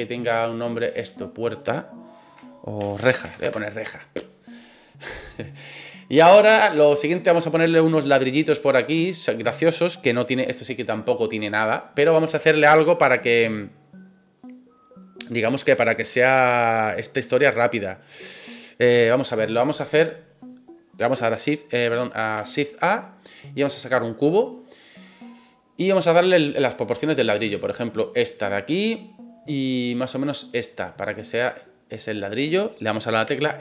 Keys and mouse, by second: 0.9-4.3 drag, 5.5 right click, 8.9 click, 22.6 shift+a, 26.6 click, 28.5-28.8 middle drag, 29.5-31.3 drag, 31.5-32.2 middle drag, 33.2 s.